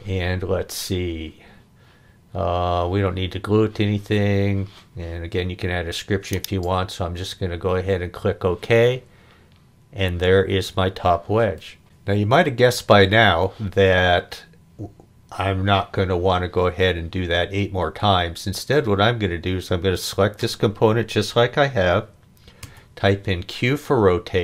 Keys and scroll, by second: 0.0 e, 22.6 q.